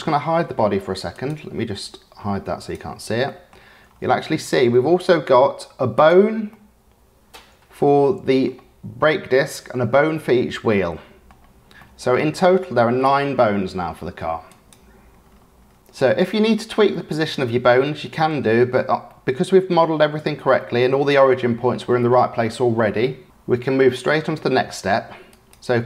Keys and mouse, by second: 2.6 click, 3.2 click, 4.7-5.2 drag, 5.9 click, 6.5-8.4 drag, 10.1-11.3 drag, 11.7-12.7 middle drag, 14.4 click, 14.7-15.1 middle drag, 15.7 click, 16.9-18.7 drag, 19.1 click, 20.5 click, 23.9-24.4 drag, 25.3 click.